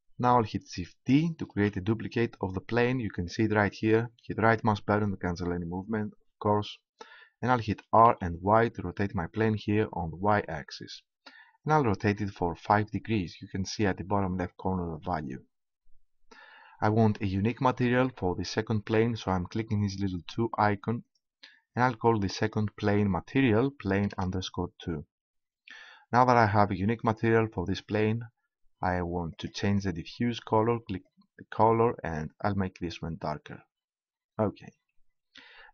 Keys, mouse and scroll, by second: 1.5 shift+d, 2.9-4.6 right drag, 7.7 r, 16.7 click, 20.2-23.0 drag, 29.4-31.0 drag.